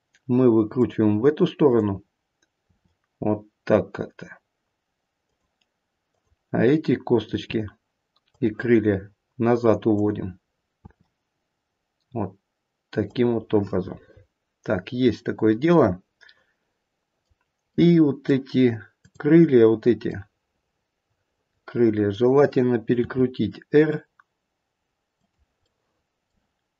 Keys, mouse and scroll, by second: 1.6 click, 2.7 r, 6.1 click, 7.3 r, 9.9 click, 10.8 r, 13.7 middle click, 15.1 middle click, 17.8 middle click, 18.9 click, 20.3 middle click, 23.0 r, 25.6 middle click.